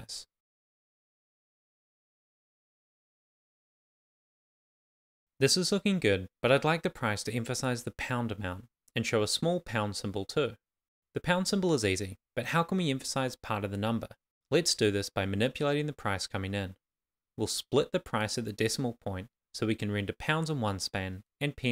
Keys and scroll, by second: 7.5 Return, 10.4-12.3 typing, 19.7 shift+,, 20.1 shift+., 20.2 shift+,, 21.5 shift+..